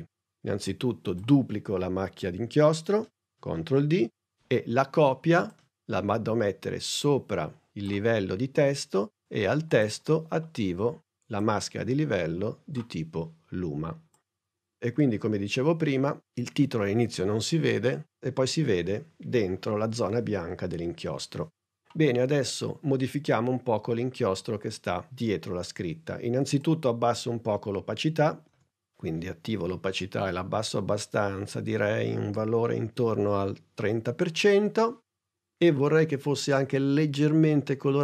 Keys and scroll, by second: 3.6 super+d, 28.6 t.